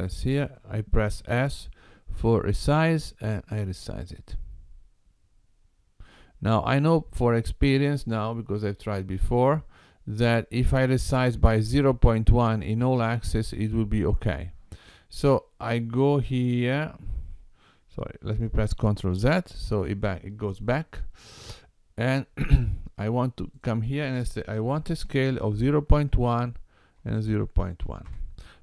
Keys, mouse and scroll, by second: 18.7 ctrl+z, 23.6 click.